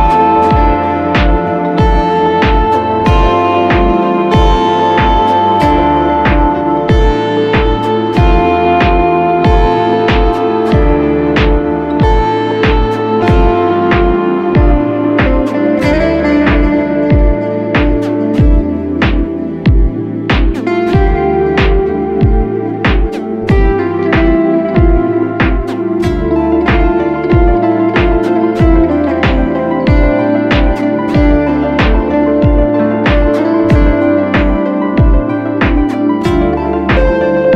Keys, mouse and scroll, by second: 0.4 double click, 13.9 alt+click, 15.4 alt+click, 16.2 alt+click, 16.3 alt+click, 21.7 ctrl+z, 25.1 ctrl+z, 28.2 alt+click, 31.3 double click, 31.9 double click.